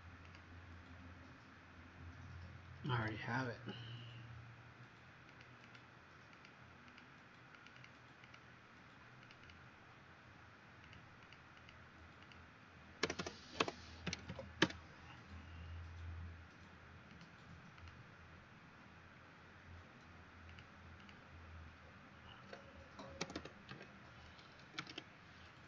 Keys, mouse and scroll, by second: 0.2 click, 3.2 Escape, 5.3 click, 5.6 click, 6.3 click, 6.8 click, 7.5 click, 8.2 click, 10.8 click, 11.1 click, 12.1 click, 12.9-14.2 typing, 14.6 Return, 17.0 click, 17.7 click, 20.4 click, 20.9 click, 22.4-25.4 typing, 23.3 Caps_Lock.